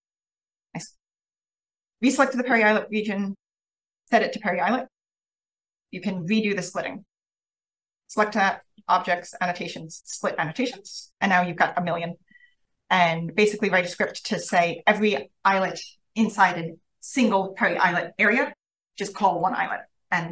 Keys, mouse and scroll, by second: 0.0-1.5 scroll up 1, 1.5-3.3 scroll up 1, 1.6 click, 3.3 click, 4.0 click, 5.2 click, 7.5-10.1 scroll up 1, 10.1-11.5 scroll up 1, 11.5 click, 11.5-12.1 scroll up 1, 11.7 click, 12.1-12.6 scroll down 1, 12.5-12.8 drag, 13.1-14.4 scroll up 1, 13.7 click, 14.3 click, 14.5 click.